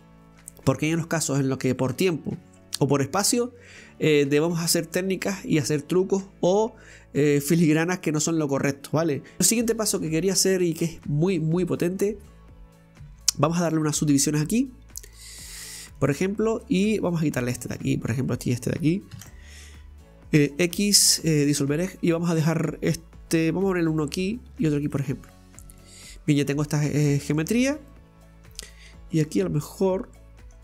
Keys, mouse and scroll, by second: 9.4 scroll up 4, 9.6 scroll down 1, 10.2-11.7 middle drag, 11.7-12.1 scroll up 2, 14.0 ctrl+r, 16.1 click, 16.4 middle click, 17.2 right click, 17.5 alt+shift+right click, 17.7 alt+shift+right click, 18.4 alt+shift+right click, 21.5 x, 21.7-22.2 scroll down 1, 22.2-23.4 middle drag, 23.4 ctrl+r, 24.5 ctrl+r, 25.4-25.8 scroll up 2, 25.8-27.5 middle drag, 27.5-27.9 scroll up 2, 27.9 middle click, 28.7-29.2 scroll down 3, 29.2 right click, 30.2-30.6 middle drag.